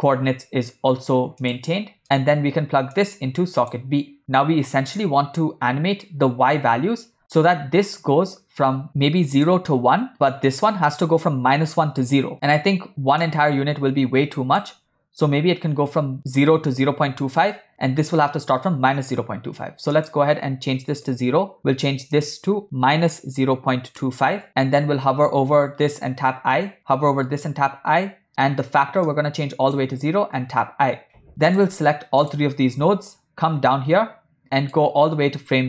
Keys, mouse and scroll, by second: 2.0 middle click, 3.0-3.9 drag, 4.3 middle click, 9.4-10.5 drag, 13.3-14.6 shift+drag, 20.0-21.2 drag, 22.2-24.4 drag, 26.5 i, 27.8 i, 28.3 middle click, 29.2 click, 30.6 i, 31.3 middle click, 31.5 shift+click, 32.3 shift+click, 33.8-34.8 middle drag.